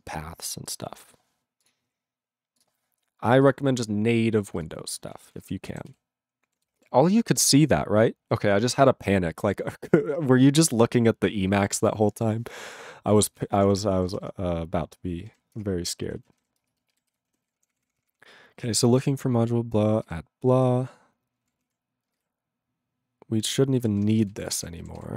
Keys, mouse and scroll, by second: 5.3 ctrl+space, 5.3 ctrl+e, 5.4 ctrl+g, 5.9 ctrl+s, 12.5 click, 12.6 click, 13.3 ctrl+s, 13.5 ctrl+a, 13.6 ctrl+p, 13.7 ctrl+p, 15.6 Return, 16.0 ctrl+a, 16.2 ctrl+e, 16.3 ctrl+g, 16.6 ctrl+space, 17.0 ctrl+alt+b, 17.1 ctrl+g, 17.4 ctrl+s, 17.6 ctrl+p, 17.7 ctrl+p, 17.8 ctrl+e, 17.8 ctrl+p, 18.0 ctrl+p, 18.1 ctrl+p, 18.6 ctrl+f, 18.9 ctrl+space, 18.9 ctrl+e, 20.0 ctrl+g, 20.4 ctrl+n, 20.5 ctrl+n, 21.4 ctrl+p, 21.5 ctrl+p, 21.6 ctrl+a, 22.1 ctrl+space, 22.1 ctrl+n, 23.8 ctrl+g, 23.9 ctrl+p, 24.2 alt+f, 24.3 alt+b, 24.6 /, 24.7 /, 25.1 ctrl+s.